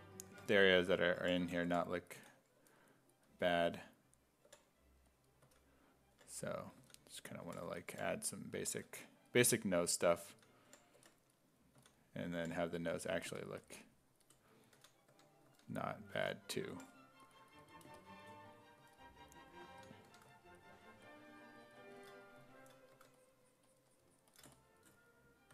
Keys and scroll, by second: 0.3-3.1 typing, 4.5-8.4 typing, 10.3 s, 10.7 5, 11.8 s, 12.4 5, 12.9 s, 14.6-16.8 typing, 18.8 s, 19.7 s, 20.1 1, 22.9 1.